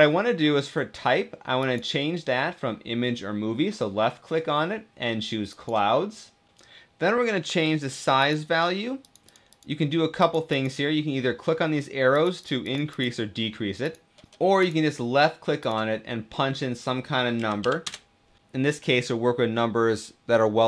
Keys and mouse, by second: 1.3-5.5 drag, 8.0 click, 8.8 click, 9.0 click, 9.3 click, 10.0 click, 10.3-12.1 drag, 12.2 click, 12.4 click, 12.7 click, 13.6 click, 14.3 click, 15.4-18.4 drag.